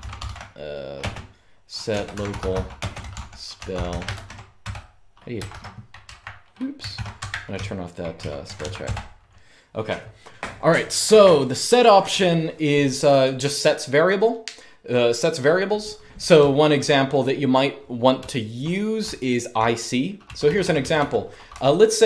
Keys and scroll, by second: 0.0-5.7 typing, 6.9-8.1 typing, 8.1 Return, 8.5 Up, 16.1-21.2 typing.